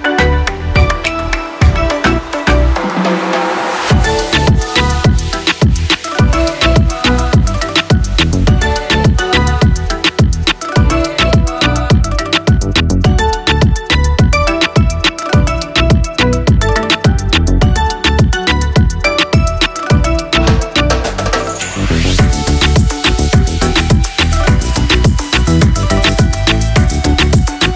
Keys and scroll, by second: 20.7 ctrl+c, 24.0 ctrl+v, 25.5 v.